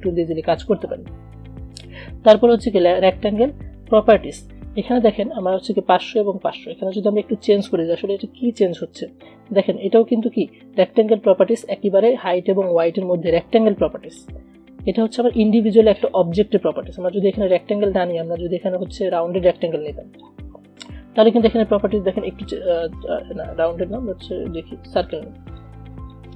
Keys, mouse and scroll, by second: 10.3 ctrl+z, 14.3 click, 15.3 space, 15.6 click, 15.8 space, 17.0-18.9 drag, 19.7-24.0 shift+drag, 24.0 click, 25.7-26.3 shift+drag.